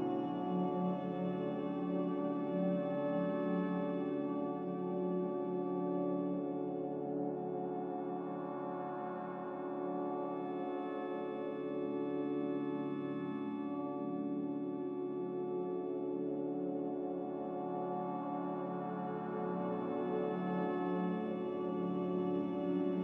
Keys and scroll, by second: 15.2 a.